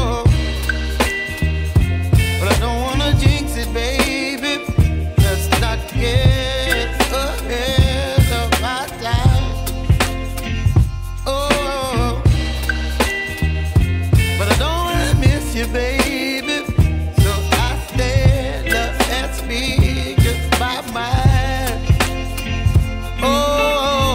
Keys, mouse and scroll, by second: 0.0-1.8 drag, 4.4 shift+middle click, 6.9-8.6 drag, 9.2 click, 20.0-23.3 drag, 22.2 BackSpace, 22.3 BackSpace.